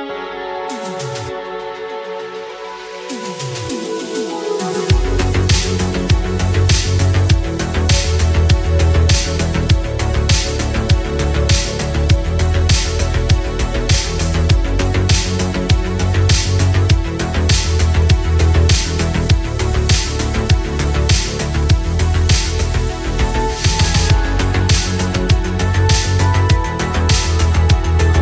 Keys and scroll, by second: 18.1 ctrl+z, 19.5 ctrl+z.